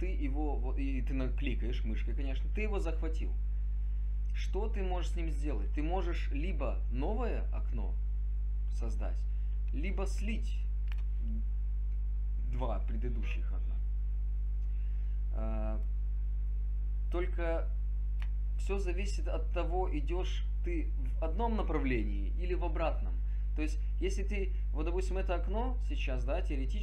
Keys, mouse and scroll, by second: 8.6 click, 16.1 click, 16.5 click, 17.1-18.1 drag.